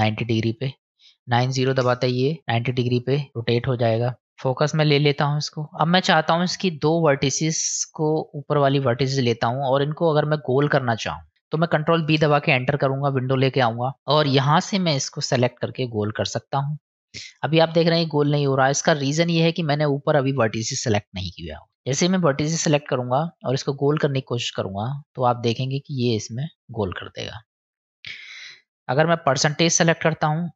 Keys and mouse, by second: 4.2 KP_Decimal, 6.4 click, 7.7 click, 8.6 click, 8.9 click, 9.8 middle click, 12.0 ctrl+b, 15.4-19.2 drag, 21.4 click, 23.0-26.2 drag, 28.7-30.0 drag.